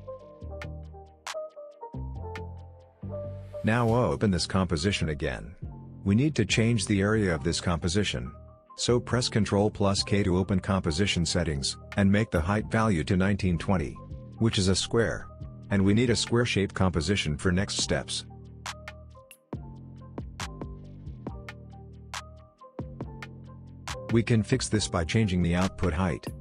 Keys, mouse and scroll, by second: 1.1 Return, 2.8 click, 8.6 ctrl+k, 10.3 click, 12.6 Return, 13.9-15.3 scroll down 1, 15.3-16.8 scroll up 1, 16.8-18.4 scroll down 1, 18.4-21.7 drag, 21.7 typing, 22.4-24.2 scroll up 1, 24.9 ctrl+z, 25.6-26.4 drag.